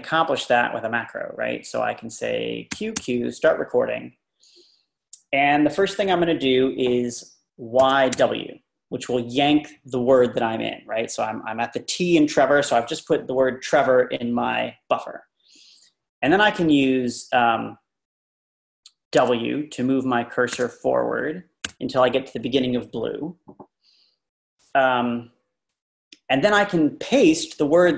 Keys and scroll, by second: 2.7 typing, 7.6-8.6 typing, 19.2 shift+w.